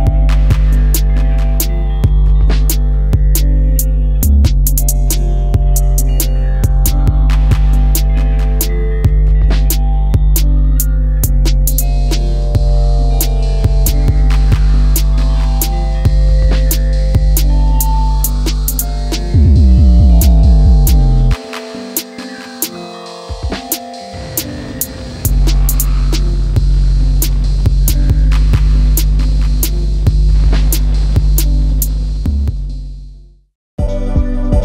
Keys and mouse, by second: 2.5 g, 6.3 click, 7.7 s, 8.0 x, 10.0 click, 11.5 g, 12.1 z, 13.4 click, 15.9-16.7 middle drag, 17.8 Tab, 19.2 middle click, 20.6 middle click, 21.4 middle click, 22.6 shift+middle click, 23.2-24.5 middle drag, 25.1 s, 26.6 right click, 26.9 middle click, 28.5 s, 28.8 x, 30.4 click, 31.2-32.2 drag, 33.1 Tab, 33.3-33.9 middle drag, 34.5-34.6 middle drag.